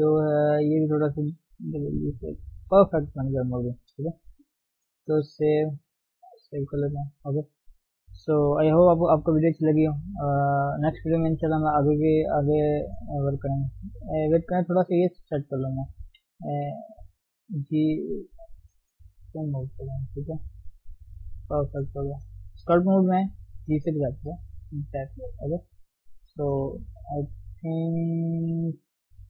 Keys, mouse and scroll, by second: 0.6 click, 1.4 g, 2.6-3.1 scroll down 4, 3.1 Tab, 3.8 ctrl+space, 4.0-5.1 scroll down 4, 5.1 ctrl+shift+s, 6.4 ctrl+shift+s, 6.6 scroll down 3, 6.9 KP_3, 7.1-7.8 scroll up 2, 8.5 scroll down 2, 8.7-10.3 shift+middle drag, 10.3-10.7 scroll up 1, 10.9-13.3 shift+middle drag, 13.3 scroll down 1, 13.5-13.9 scroll up 2, 13.9 shift+middle click, 14.2-14.6 scroll up 1, 14.6-16.2 shift+middle drag, 16.2 ctrl+Tab, 17.1 g, 17.3 f, 17.8-18.1 scroll up 1, 18.1 shift+z, 18.9 click, 19.4 shift+z, 19.8 click, 20.3-20.9 scroll down 1, 20.9 scroll up 2, 21.2-22.7 drag, 22.7-23.4 scroll down 1, 23.4 scroll down 1, 23.7-24.1 scroll up 1, 24.2-25.3 drag, 25.3 scroll down 1, 25.4 shift+middle click, 26.1 click, 26.6 shift+middle click, 26.9-27.4 scroll up 1, 27.4-29.2 drag.